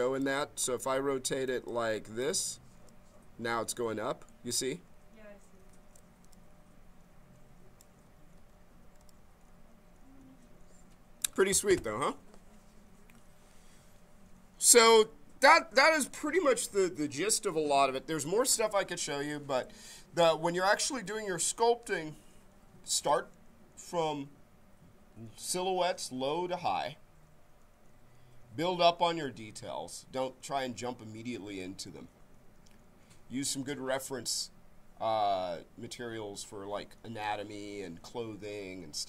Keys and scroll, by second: 0.5 s, 5.5 q, 8.3 ctrl+z.